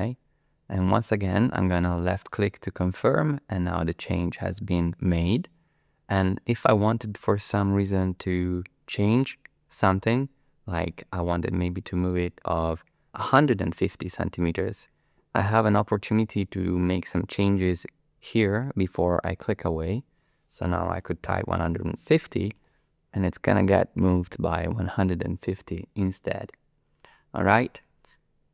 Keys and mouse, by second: 2.3 click, 19.7-22.6 drag.